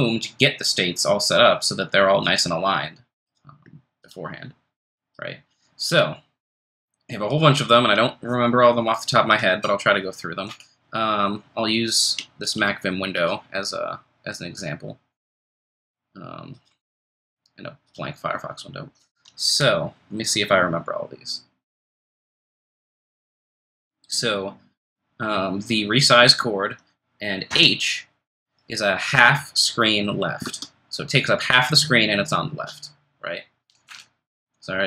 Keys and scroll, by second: 16.9 super+t, 27.5 ctrl+shift+super+h, 30.4 super+Tab.